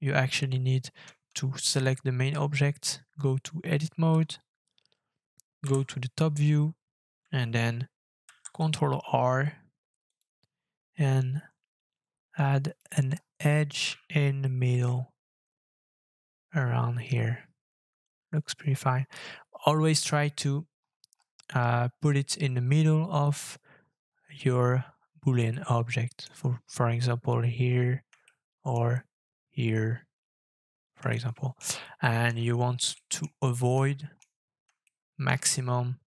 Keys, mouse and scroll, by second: 2.3-4.0 Tab, 5.6 KP_7, 8.3 ctrl+r, 13.1-13.9 scroll up 12, 14.4 shift+middle click, 14.8-15.1 shift+scroll up 4, 16.7-17.5 scroll down 15, 19.3 Tab, 20.4-23.0 scroll up 18, 23.0-24.0 scroll down 18, 24.4 scroll down 3, 25.5 shift+middle click, 28.2 shift+middle click, 31.1 shift+middle click, 32.0 shift+middle click, 32.3 shift+scroll up 6, 32.9 shift+middle click, 33.2-33.5 shift+scroll up 5, 33.8 shift+middle click, 34.1-34.8 shift+scroll up 7, 34.8 shift+middle click, 35.4 scroll up 4.